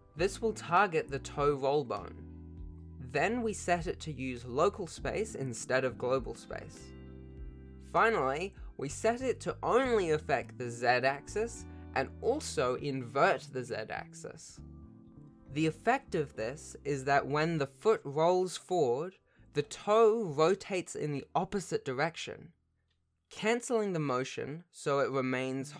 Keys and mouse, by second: 2.1 ctrl+shift+click, 3.5-4.7 drag, 5.3 click, 5.9 r, 7.9 click, 9.5-12.5 drag, 16.9 click, 17.6 alt+r, 18.2 r, 20.2 alt+r, 20.8 r.